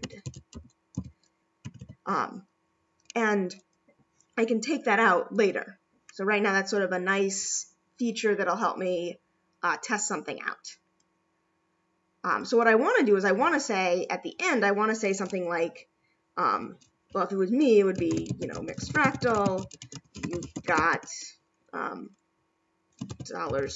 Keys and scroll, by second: 1.6 ], 23.1 4.